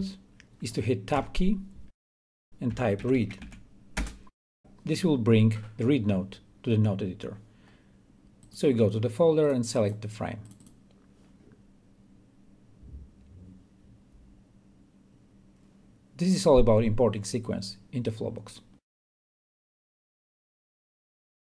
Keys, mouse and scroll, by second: 1.9 Tab, 2.7 Tab, 2.9-4.0 typing, 4.1 Return, 9.2 click.